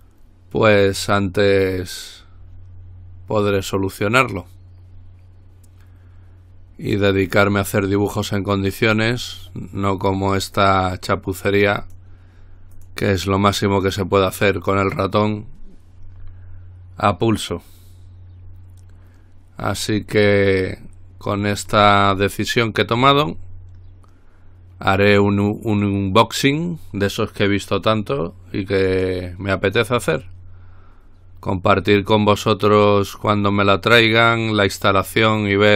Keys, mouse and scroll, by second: 9.4 click, 10.8 click, 12.0 click, 12.9 click, 13.7 click, 20.7-21.2 scroll up 2, 22.4-23.8 middle drag, 23.8-24.6 scroll up 2, 24.6-25.5 scroll down 2, 29.1 click, 30.4-32.4 drag, 33.0-35.5 drag, 35.5-35.7 scroll up 1.